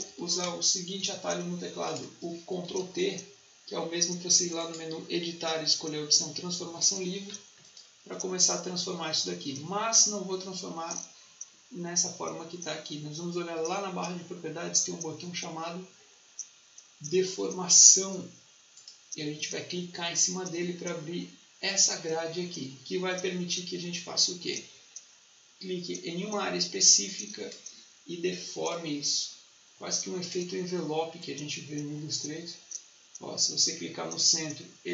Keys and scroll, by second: 0.0-0.7 typing, 2.5 ctrl+t.